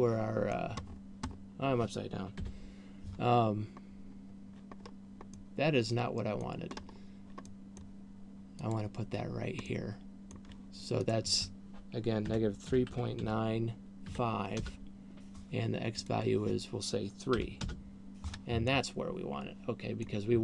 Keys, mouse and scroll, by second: 1.4-2.9 scroll down 7, 2.9 KP_1, 4.9-5.6 scroll down 3, 5.9 middle click, 7.1-7.6 scroll up 4, 7.9 middle click, 9.1 click, 9.9 middle click, 11.6 click, 16.4 click, 19.1 middle click.